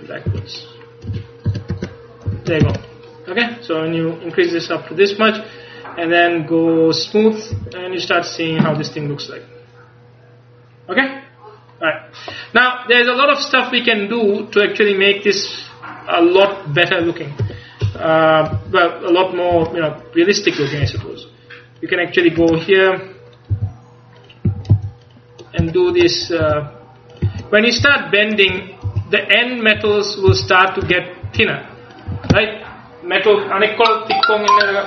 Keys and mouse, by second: 0.4 a, 1.2 z, 1.5 z, 1.8 Tab, 2.4 a, 2.7 ctrl+s, 7.6 a, 7.9-9.2 middle drag, 14.2-15.6 middle drag, 17.5 KP_1, 17.9 KP_3, 18.6 z, 19.6 Tab, 20.9 c, 23.6 g, 24.6 a, 24.8 c, 26.5 g, 27.2 click, 27.3 a, 27.9 c, 29.0-32.2 typing.